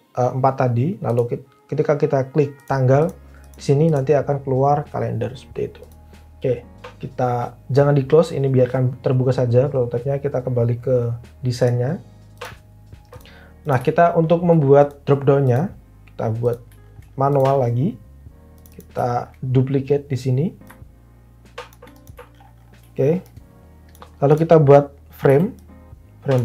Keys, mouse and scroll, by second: 25.3 f.